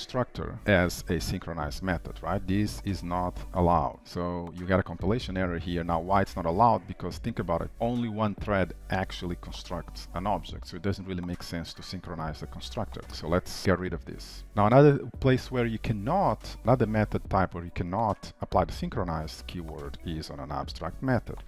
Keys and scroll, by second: 14.0 ctrl+/, 15.9 shift+Return, 19.5 Return.